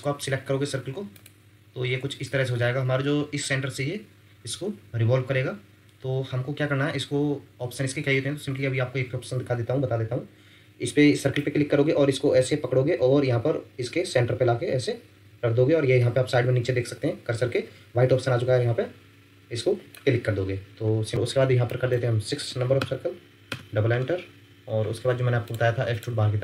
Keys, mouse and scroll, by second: 1.8 scroll up 1, 20.7 scroll up 1, 21.0 scroll down 1, 22.8 Return, 23.5 Return.